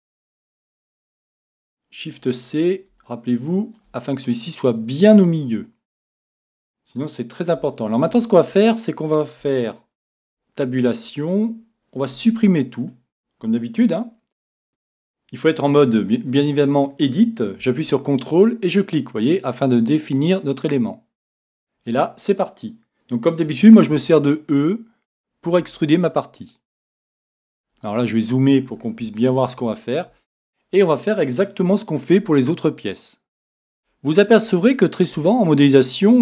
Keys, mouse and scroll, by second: 3.0-4.9 middle drag, 7.1-7.7 scroll down 1, 7.7-9.6 middle drag, 10.2 Tab, 12.1 x, 14.7 Tab, 18.2-23.0 drag, 23.9 e, 25.1-29.3 drag, 25.6 e, 26.8 e, 27.8 middle click, 27.9 middle click, 29.2-32.2 middle drag, 32.2 e, 33.6-36.2 drag, 33.7 e, 35.2 e.